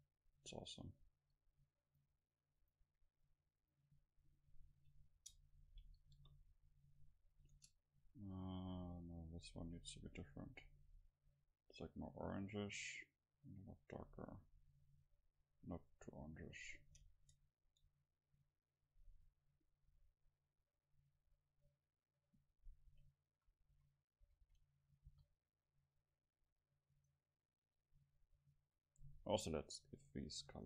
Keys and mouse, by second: 0.0 middle click, 0.1-1.1 drag, 1.9-3.4 drag, 5.1 Tab, 6.2 KP_0, 7.5 Tab, 9.6-13.4 drag, 17.1 Tab, 22.6-23.6 middle drag, 23.4 a, 23.7 a, 24.2 a, 24.4 a, 25.1 ctrl+s, 27.0-29.4 right drag, 29.4-30.6 drag.